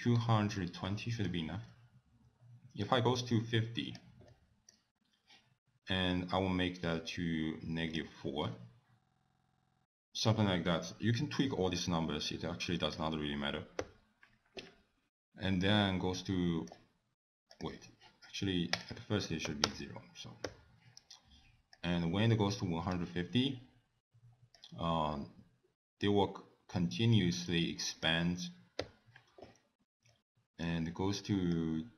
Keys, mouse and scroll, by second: 0.2-0.9 scroll down 7, 0.9 middle click, 1.3-2.0 scroll down 3, 2.8 click, 4.3 middle click, 6.4 click, 8.4 scroll down 6, 9.4 click, 12.3 click, 13.8 i, 16.1 middle click, 17.5 click, 18.8 click, 20.4 i, 21.7 click, 24.5 click, 28.8 i, 30.1 middle click, 31.5 click.